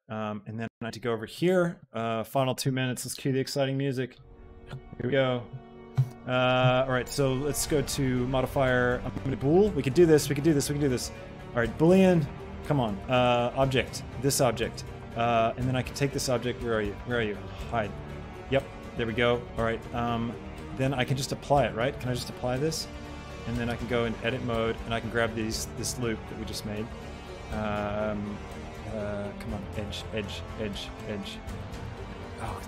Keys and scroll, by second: 23.5 Tab.